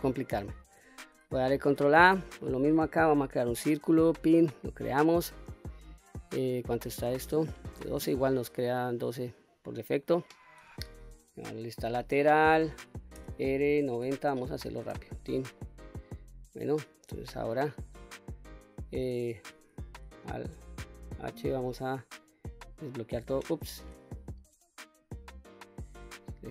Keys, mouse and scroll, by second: 1.2 shift+a, 4.1-5.7 middle drag, 6.5 click, 8.0-8.4 scroll down 1, 8.4-8.8 scroll up 2, 10.8 KP_3, 12.6 r, 13.2 KP_9, 13.5 KP_0, 14.3 Return, 15.0-15.4 middle drag, 15.7 scroll down 2, 16.1 middle click, 20.5 alt+h, 21.9-22.6 drag, 23.1 ctrl+z, 24.5 click, 25.4 click.